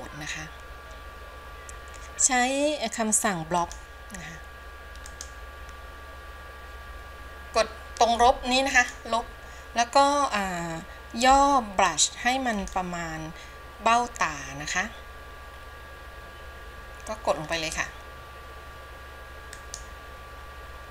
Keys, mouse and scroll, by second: 3.7 click, 5.3-11.4 drag, 11.4 f, 12.8 f, 17.7-20.9 drag.